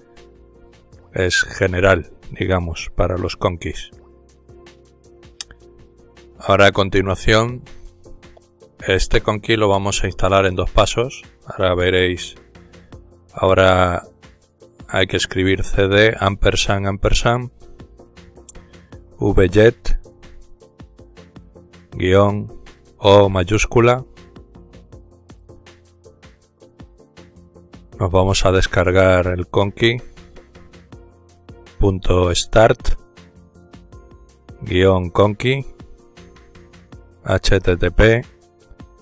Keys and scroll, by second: 0.2-0.9 typing, 7.1-8.7 typing, 11.1 typing, 13.6-16.2 typing, 18.2-21.8 typing, 23.4 typing, 27.8 typing, 30.6-35.2 typing, 36.7-39.0 typing.